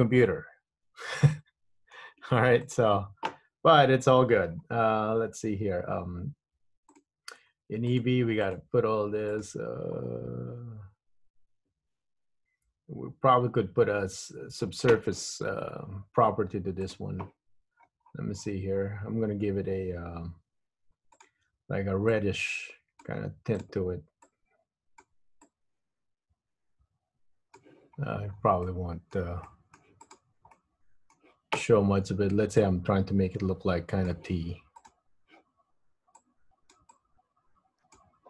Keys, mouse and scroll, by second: 2.7 click, 4.3-7.0 scroll down 13, 7.0 click, 8.2 click, 8.7 click, 9.5 click, 17.0 click, 17.8-18.2 scroll down 5, 18.2-20.0 scroll up 16, 21.3 click, 23.8 click, 24.5 click, 25.6 click, 28.3-28.6 scroll up 3, 28.6 scroll down 3, 28.8 middle click, 29.6 middle click, 30.3 click, 30.7 middle click, 30.7 scroll down 1, 32.7 click, 35.1 click, 36.3 click, 37.1 click.